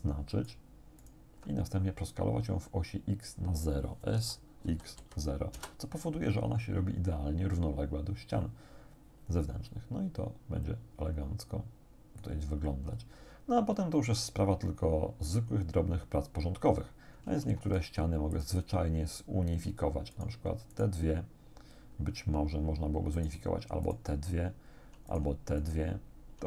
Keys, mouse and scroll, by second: 0.3 alt+shift+right click, 1.1 alt+shift+right click, 4.2 s, 4.7 x, 5.0 0, 5.6 Return, 10.7-12.5 drag, 17.3 ctrl+Tab, 18.4 click, 20.2 shift+right click, 20.7 shift+right click, 23.2 shift+right click, 23.9 shift+right click, 25.1 shift+right click, 25.6 shift+right click.